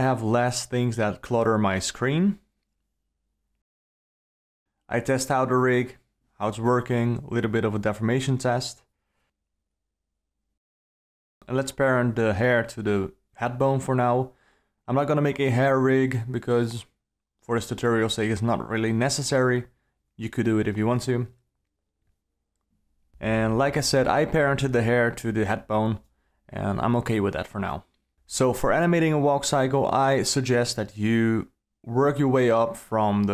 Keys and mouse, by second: 1.7-2.8 ctrl+middle drag, 4.1 alt+click, 4.4 alt+middle click, 6.7-7.5 alt+middle drag, 8.1 click, 8.6 g, 11.6 g, 16.5 alt+middle click, 22.5 shift+click, 23.6 ctrl+p, 27.3 alt+a, 27.9 alt+a, 28.0 click, 29.0 r, 29.9 r, 32.5 alt+a.